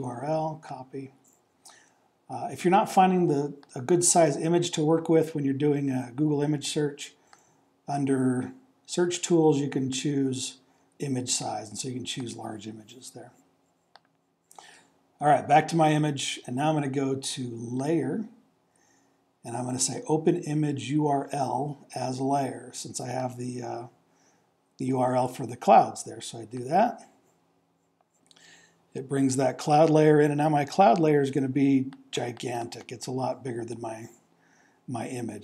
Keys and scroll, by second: 25.2 super+v.